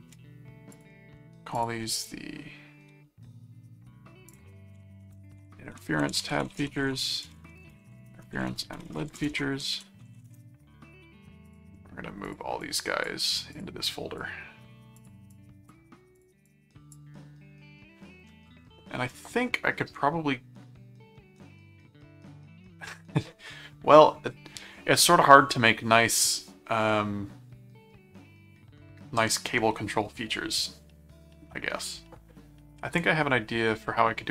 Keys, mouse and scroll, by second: 0.7 shift+click, 1.6 shift+click, 1.9 shift+right click, 4.3 click, 5.0-10.8 typing, 11.5 click, 12.3 click, 13.5 click, 14.9 click, 16.2 click.